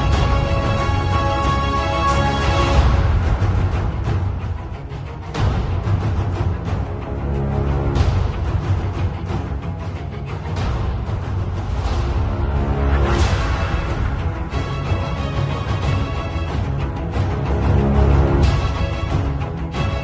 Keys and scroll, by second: 0.4 b, 1.4 ctrl+alt+x, 2.3 x, 3.4 z, 4.3 v, 6.9-10.1 typing, 10.6 Return, 13.3 super+z, 15.0 Return, 15.3 super+[, 16.0 super+t.